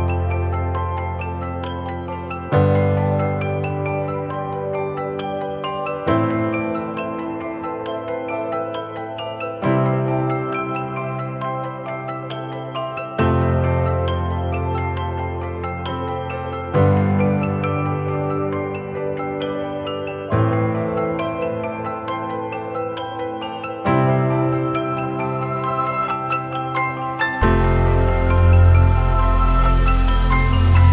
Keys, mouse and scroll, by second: 13.4 double click, 18.4 double click.